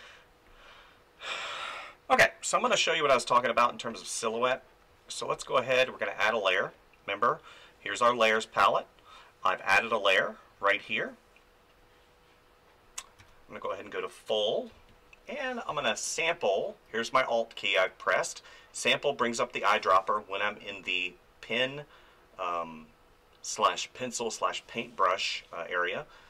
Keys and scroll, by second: 13.2 f, 14.7 space.